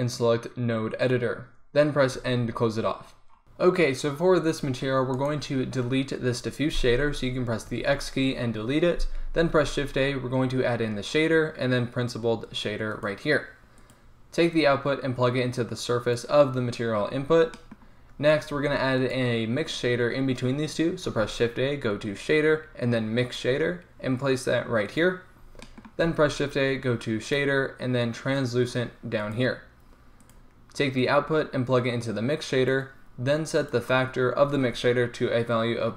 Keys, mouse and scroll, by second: 2.2 n, 3.4-7.7 right drag, 7.7 x, 9.7 shift+a, 14.7-18.4 drag, 18.4-21.1 right drag, 18.7 g, 21.1 shift+a, 25.2-29.4 drag, 26.2 shift+a, 31.1-35.9 drag.